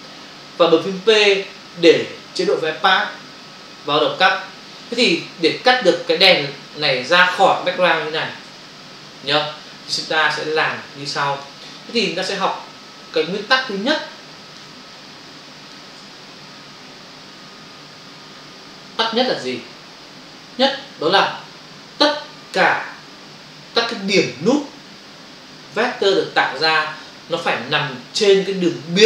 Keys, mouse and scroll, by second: 8.5 ctrl+o, 10.7 ctrl+click, 11.7 click, 12.4 ctrl+click, 14.9 click.